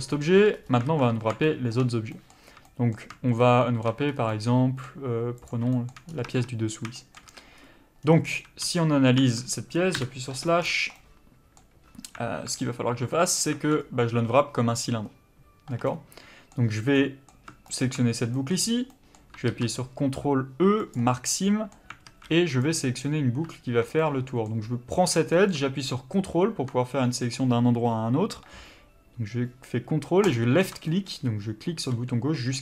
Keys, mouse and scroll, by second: 0.0 KP_Divide, 0.5 scroll up 1, 0.8 alt+a, 1.5 shift+middle click, 4.0 scroll up 1, 4.3 middle click, 5.5 click, 5.7 shift+middle click, 6.1 scroll up 1, 6.2 Tab, 6.9 shift+middle click, 7.3 a, 7.6-8.0 scroll up 1, 8.0 scroll down 1, 8.3 a, 9.2 Tab, 9.9 KP_Divide, 10.2 Tab, 10.6-10.9 scroll down 1, 10.9 middle click, 13.8-14.2 scroll down 1, 15.9 middle click, 17.7 alt+click, 18.3 middle click, 20.9 ctrl+e, 21.3 middle click, 22.0 alt+a, 22.5 click, 24.0 middle click, 30.3 ctrl+click, 30.9 middle click.